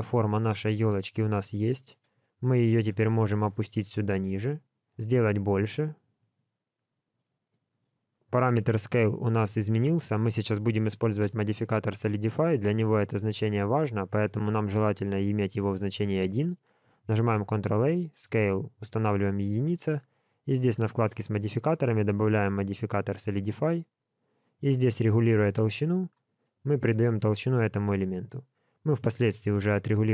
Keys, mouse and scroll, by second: 0.2 scroll down 2, 0.4 shift+middle click, 1.5 shift+middle click, 2.4 g, 7.2 shift+middle click, 17.1 ctrl+a, 20.4 click, 21.3 click, 24.4 click, 26.4 middle click, 27.1 scroll up 3, 29.5 click.